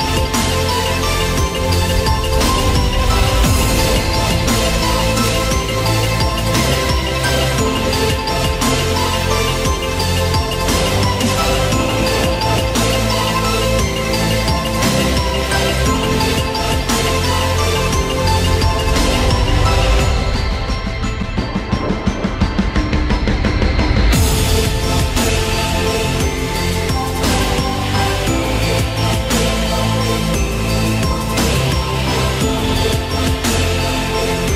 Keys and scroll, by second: 12.1 ctrl+alt+z, 22.4 ctrl+alt+z, 28.2 ctrl+alt+z.